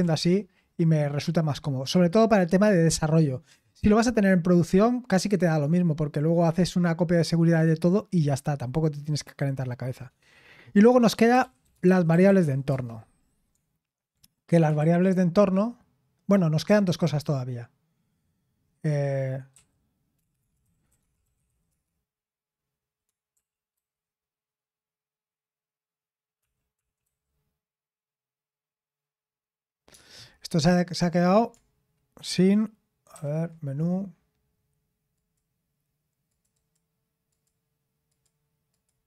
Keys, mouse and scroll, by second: 38.7 click.